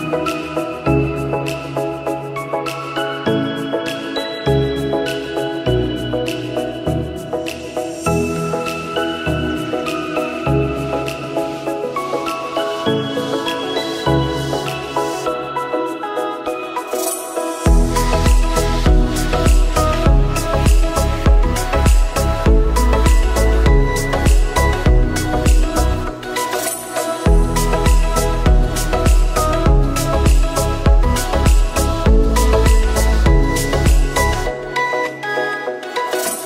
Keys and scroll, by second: 8.2 ctrl+c, 12.7 ctrl+v.